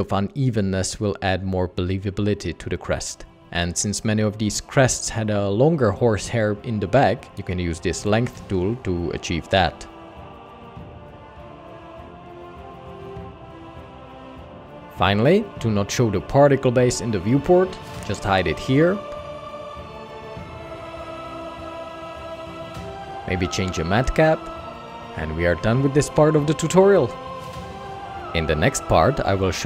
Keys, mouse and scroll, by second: 14.5 ctrl+Tab, 29.3 typing.